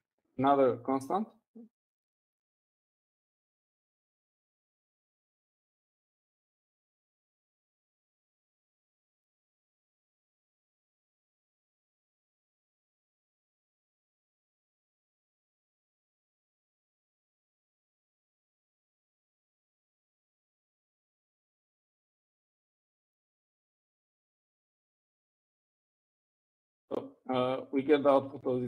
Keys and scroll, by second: 9.1-13.8 typing, 15.4 typing, 16.5-21.3 typing, 24.0-25.6 typing.